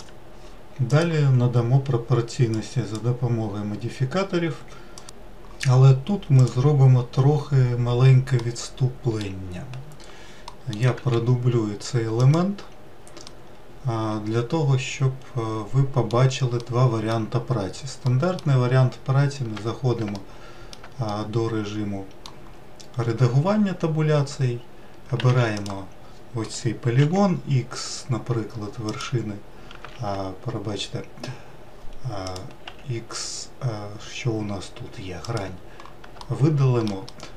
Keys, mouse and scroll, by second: 1.0-5.0 drag, 6.4 click, 8.4-11.0 middle drag, 11.0 shift+d, 13.2-16.3 middle drag, 16.6-18.7 middle drag, 18.7-19.2 scroll up 1, 19.5 Tab, 20.1 alt+middle click, 21.1-22.6 middle drag, 22.6-24.5 scroll up 1, 25.3 3, 25.5 click, 27.0 x, 29.9 ctrl+z, 32.2 click, 32.6 x, 36.2 alt+middle click, 37.1-37.3 middle drag.